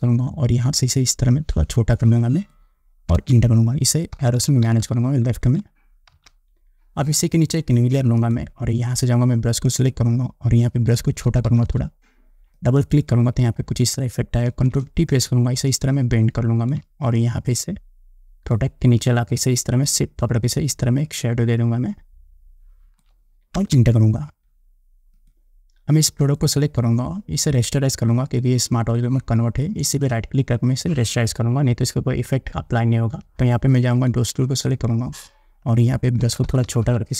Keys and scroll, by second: 3.4 Return, 4.9 Left, 6.4 Down, 11.2 [, 14.7 ctrl+t, 23.8 Return, 36.4 [.